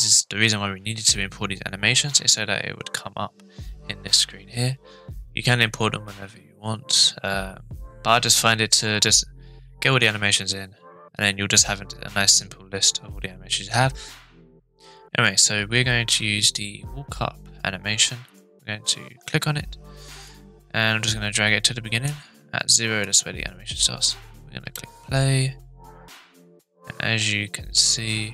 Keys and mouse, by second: 20.3-22.1 drag, 23.0-24.0 drag, 24.6 space.